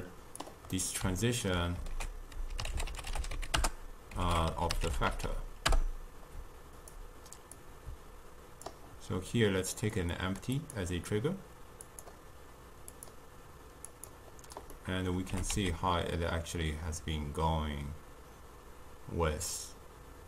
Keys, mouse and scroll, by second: 0.8-2.0 middle drag, 2.0 ctrl+a, 4.3 ctrl+a, 7.6-10.0 drag, 10.6 click, 11.9 click, 13.9 click, 14.8-15.4 middle drag, 15.4 g.